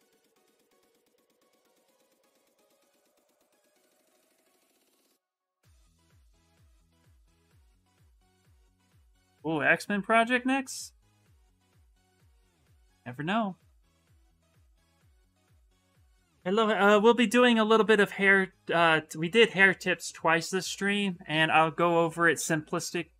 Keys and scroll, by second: 3.5 s.